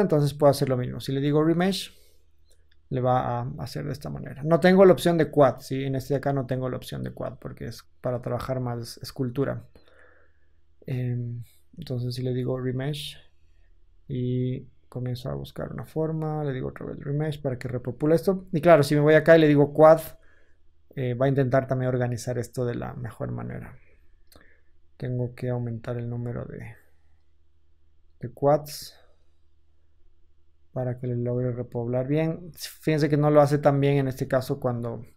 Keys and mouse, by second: 3.7 ctrl+z, 18.8-19.8 middle drag, 19.8-33.2 drag, 23.8 ctrl+z, 33.9 ctrl+z.